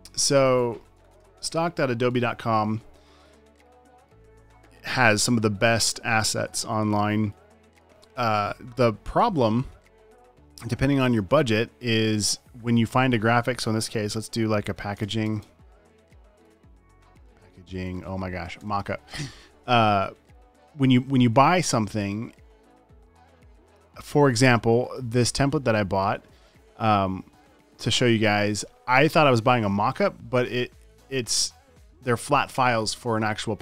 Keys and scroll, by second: 1.2-2.3 typing, 2.6 Return, 2.7 Caps_Lock, 14.9-19.8 typing, 32.3 space.